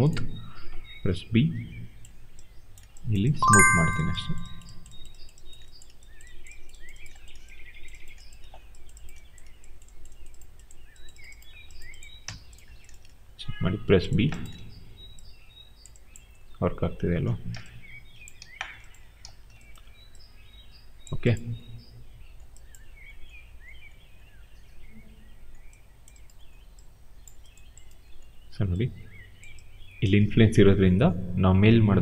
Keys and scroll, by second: 0.9 b, 12.1 w, 14.5 e, 18.3 ctrl+z, 19.1 ctrl+z.